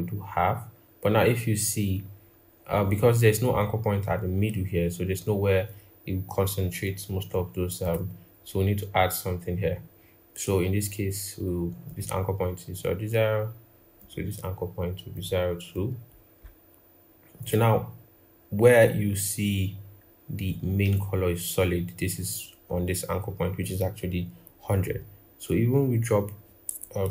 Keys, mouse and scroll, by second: 27.0 ctrl+z.